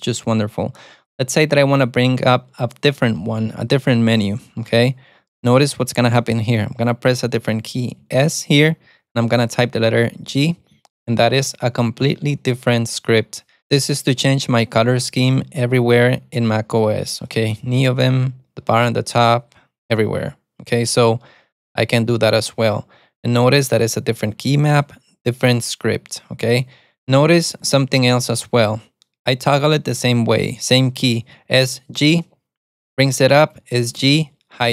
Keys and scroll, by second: 10.5 alt+super+a, 27.8 alt+super+a, 32.1 alt+super+a, 34.1 alt+super+a.